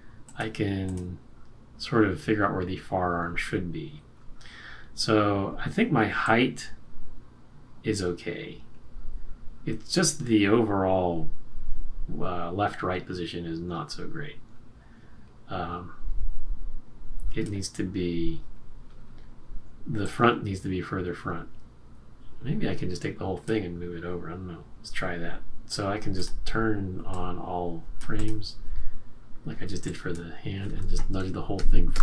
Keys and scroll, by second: 31.5 shift+Right, 31.9 shift+Right.